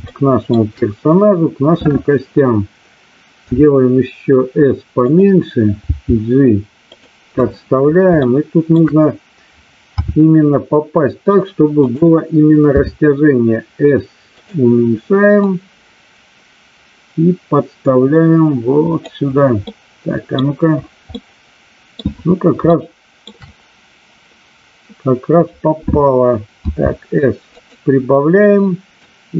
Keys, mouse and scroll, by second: 0.0 shift+middle click, 3.5 s, 5.0 click, 5.9 g, 6.8 click, 8.3 shift+middle click, 9.9 r, 11.9 click, 15.5-19.0 drag, 19.6-20.4 middle drag, 21.0-21.9 middle drag, 22.6-23.2 shift+middle drag, 26.6 s, 27.5 click, 29.0-29.3 drag.